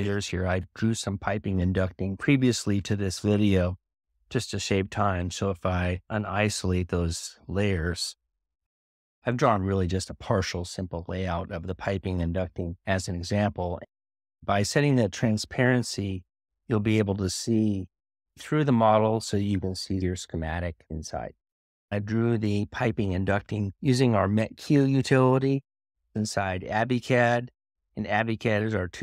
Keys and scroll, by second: 5.5 typing.